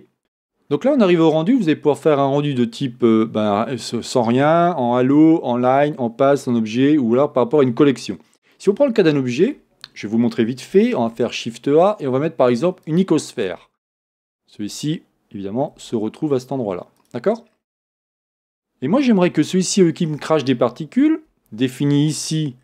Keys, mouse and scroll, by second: 9.5-9.9 scroll down 2, 11.0 shift+a, 13.8-16.0 scroll down 2, 16.0 g, 17.5-18.4 scroll up 1, 18.5 click, 19.6-22.6 shift+middle drag, 21.8-22.3 scroll down 1.